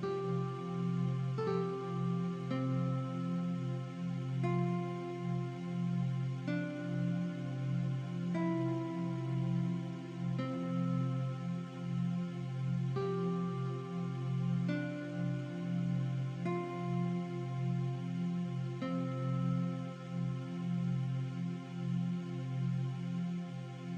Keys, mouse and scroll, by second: 2.2 click, 4.7 BackSpace, 7.2 click, 7.9 KP_1, 8.5 Return, 12.7 click, 19.2 click, 23.1 click, 23.7 KP_2.